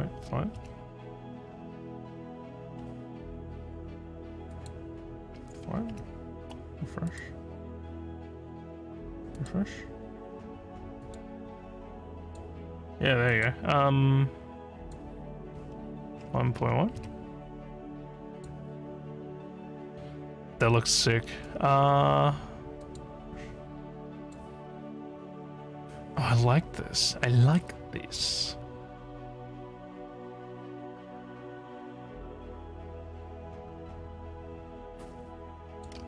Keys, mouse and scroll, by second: 19.7 a.